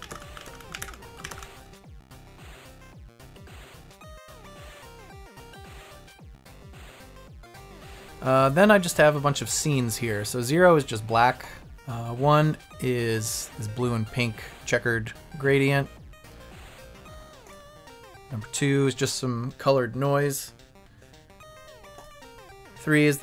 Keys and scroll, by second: 0.0 Left, 0.0 Down, 0.1 Right, 0.3 Left, 0.4 Down, 0.4 Right, 0.7 Up, 0.8 Right, 1.2 Left, 1.2 Down, 1.3 Right, 1.9 Down, 2.8 Down, 3.7 Up, 4.2 Left, 4.7 Right, 5.3 Down, 6.0 Left, 6.1 Down, 6.2 Right, 7.6 Left, 7.8 Up.